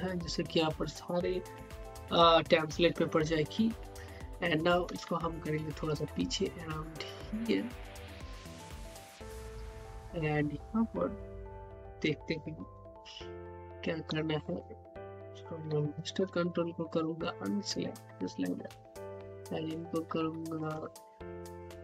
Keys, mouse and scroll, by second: 5.4 shift+Num_Lock, 5.4 typing, 5.7 shift+click, 6.0-9.5 middle drag, 9.5 click, 13.6 click, 15.7 q, 17.1-18.6 ctrl+drag, 18.6 e, 19.7 click, 19.7 click, 20.7 z, 21.5 click.